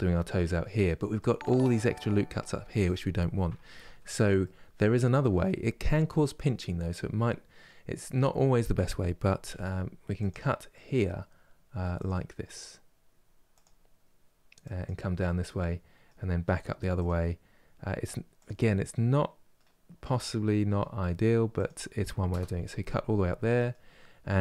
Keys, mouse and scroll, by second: 0.6-3.5 middle drag, 3.5 ctrl+z, 4.1-9.1 middle drag, 9.1 k, 14.9-17.9 middle drag, 18.3-24.4 middle drag.